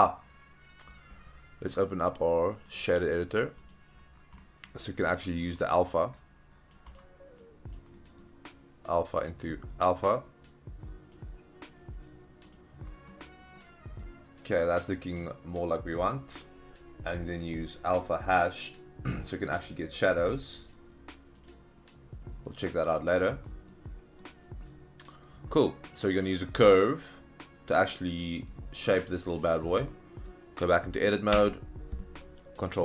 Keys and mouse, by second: 2.8-3.7 drag, 4.4 middle click, 5.6 middle drag, 6.2-6.7 drag, 7.4-7.7 drag, 8.1 middle drag, 9.1-11.2 drag, 13.1-13.6 middle drag, 14.0-16.0 middle drag, 17.4-18.3 drag, 19.4-21.5 drag, 22.5 middle click, 23.2 click, 23.7-24.2 middle drag, 26.6 middle drag, 27.9-28.5 middle drag, 29.9-30.3 middle drag, 31.4 Tab.